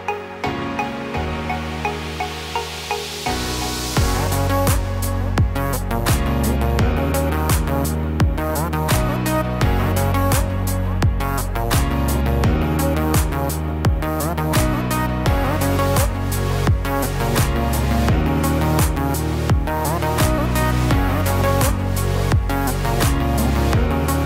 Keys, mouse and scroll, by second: 0.1 Tab, 1.6 click, 1.8 click, 2.8 s, 5.5 e, 8.1 KP_1, 9.8 middle click, 11.1 ctrl+z, 12.6 click, 14.3 e, 20.3 KP_3, 21.7 KP_1, 23.4 g.